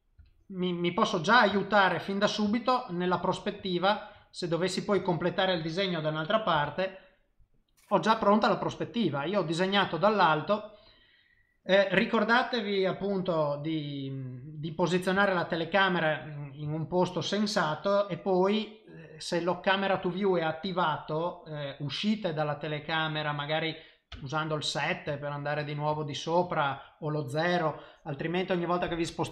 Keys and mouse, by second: 0.2 n, 0.5 middle click, 1.1 middle click, 1.5 shift+middle click, 2.1 middle click, 2.5 shift+middle click, 3.1 middle click, 3.6 shift+middle click, 4.2 middle click, 5.0 shift+middle click, 7.1 F12, 9.7 middle click, 11.7 middle click, 13.6 middle click, 15.2 shift+middle click, 15.6 middle click, 16.7 shift+middle click, 24.1 KP_7, 25.1 ctrl+middle click, 26.0 shift+middle click.